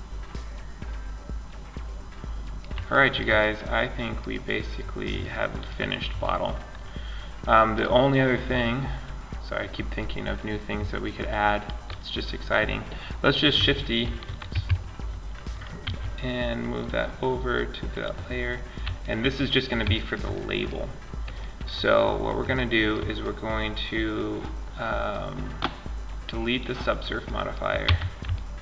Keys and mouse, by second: 6.9-8.6 drag, 9.1-10.2 middle drag, 13.2 shift+d, 15.0 m, 18.4-19.2 middle drag, 25.7 click, 26.4 middle click, 27.0 Tab, 27.2-28.6 drag.